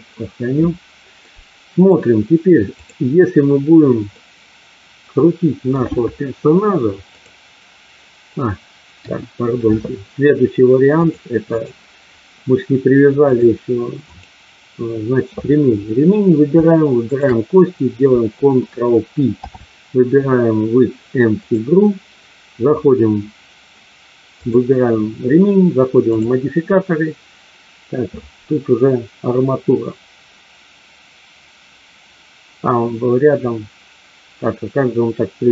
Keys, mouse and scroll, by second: 1.2 middle click, 2.8-3.6 drag, 4.1-5.8 middle drag, 7.1 click, 8.9 KP_1, 11.1 click, 13.2 click, 13.9 click, 19.2 ctrl+p, 24.3 click.